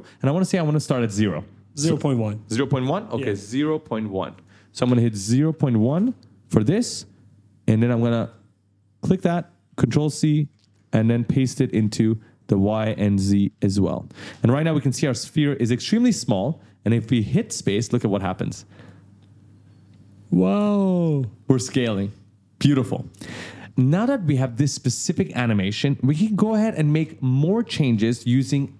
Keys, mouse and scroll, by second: 4.3 click, 5.5 0, 5.7 1, 5.9 Return, 7.8 click, 9.6 ctrl+c, 10.3 click, 10.6 ctrl+v, 11.3 click, 11.8 ctrl+v, 12.4 click, 13.1 click, 13.4 ctrl+v, 13.7 click, 16.9 click, 17.6 space, 18.8 right click, 23.1 space, 23.6 click.